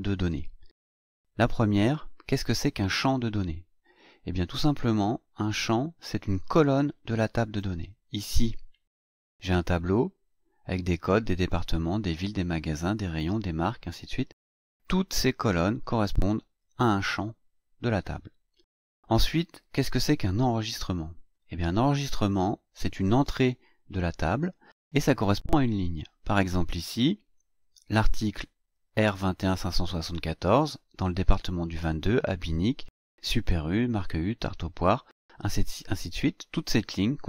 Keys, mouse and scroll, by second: 20.4-20.9 scroll down 2, 21.3 scroll down 2, 22.2 scroll down 1.